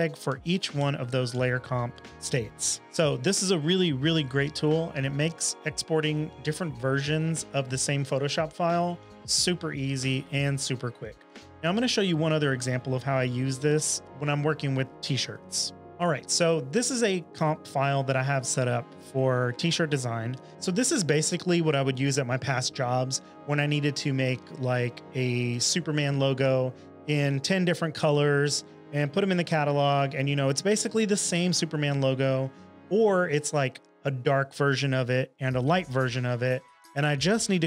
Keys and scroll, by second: 0.3 Right, 0.8 Right, 1.3 Right, 1.7 Left, 1.9 Left, 2.1 Left, 2.1 space, 15.8 s.